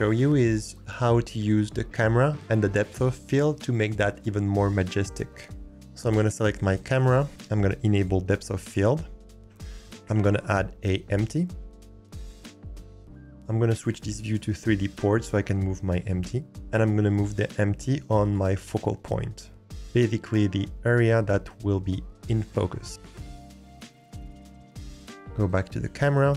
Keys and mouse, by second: 6.3 click, 8.0 click, 10.0 shift+a, 13.3-14.3 drag, 17.0 g, 19.3 alt+click, 20.0 click, 21.5 click, 23.4 alt+click, 23.7 g, 24.3 alt+click, 24.7 g.